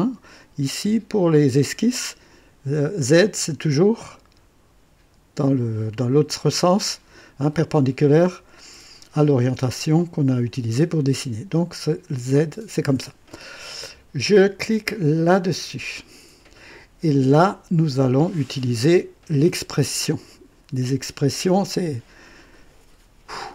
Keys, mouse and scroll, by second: 15.5 click.